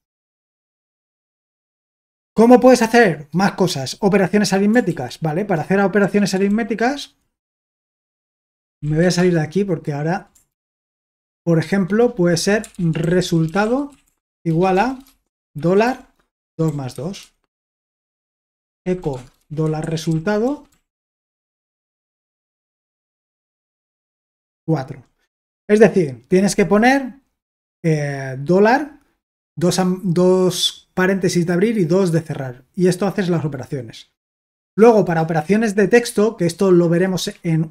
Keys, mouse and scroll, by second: 4.9 ctrl+k, 6.0 BackSpace, 6.5 ctrl+l, 8.3-9.5 typing, 10.5 ctrl+l, 10.8 Return, 12.6-23.6 typing, 24.0 Return.